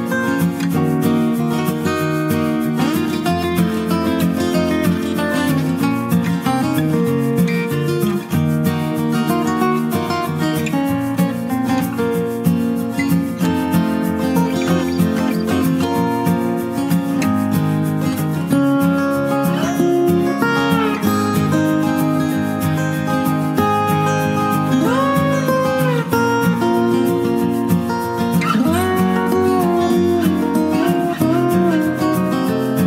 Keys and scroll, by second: 18.0 Return, 18.0 typing, 29.4 alt+Delete.